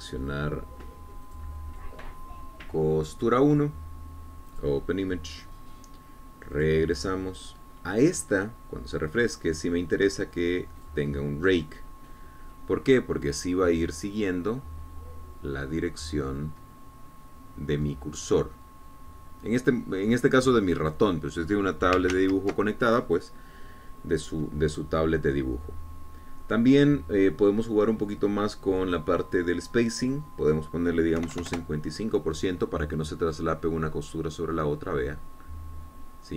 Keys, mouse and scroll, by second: 2.5 click, 4.4 click, 5.7 click, 7.8 click, 12.0 click, 14.6-22.4 drag, 23.4 ctrl+z, 27.0-28.2 scroll down 4, 31.3 click, 32.7 KP_Enter, 34.6-36.3 drag.